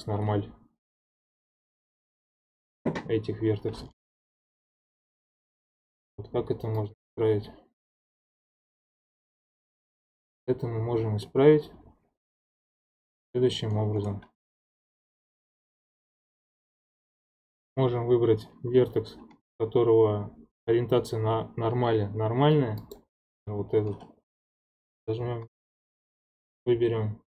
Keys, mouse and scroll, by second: 2.0 middle click, 2.5-3.8 scroll up 3, 4.0 1, 5.5-6.8 scroll down 2, 6.8-9.3 drag, 9.3 middle click, 10.2 click, 11.2-16.3 middle drag, 14.4-15.2 scroll up 5, 16.3 2, 16.9 1, 22.8 click, 25.4 alt+n.